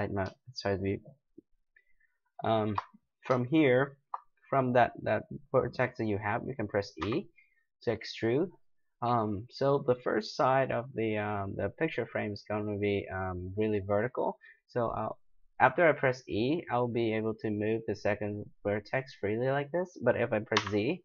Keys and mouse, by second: 7.0 e.